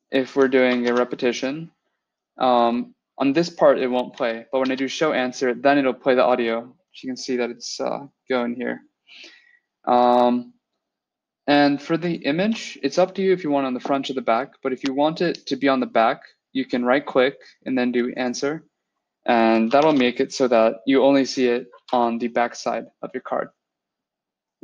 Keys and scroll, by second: 0.7 alt+shift+l, 4.5 Return, 19.7 alt+shift+l, 21.6 Return.